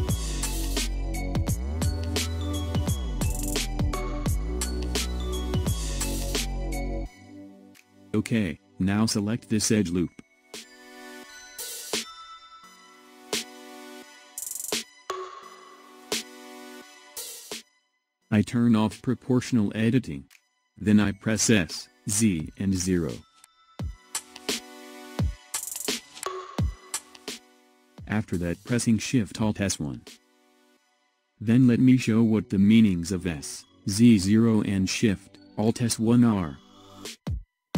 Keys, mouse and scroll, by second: 1.6-2.1 scroll up 2, 2.1-5.1 middle drag, 7.6 click, 9.2 click, 10.0-17.2 middle drag, 17.6 s, 18.9 click, 20.3 s, 27.8 alt+shift+s, 33.7-34.4 scroll down 1, 34.4-36.8 middle drag, 36.8-37.2 scroll down 2, 37.2 middle click.